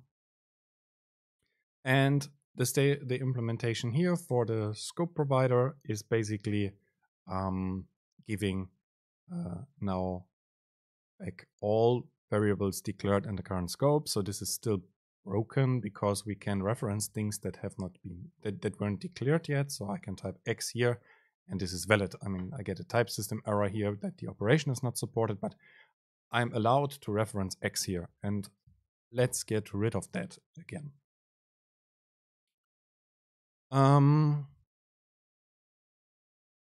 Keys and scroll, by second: 26.9 super+space, 29.1 BackSpace.